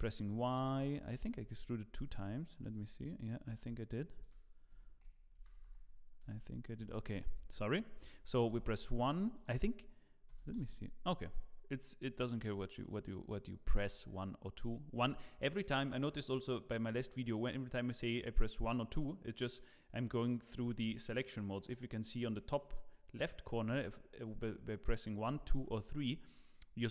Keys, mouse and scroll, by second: 0.2 shift+middle click, 1.2 ctrl+z, 2.1 g, 3.4 ctrl+z, 5.3 ctrl+z, 5.5 ctrl+z, 6.2 g, 7.2 scroll up 1, 7.5 shift+middle click, 8.5 1, 9.3 2, 10.3 e, 25.2 1, 25.2 2.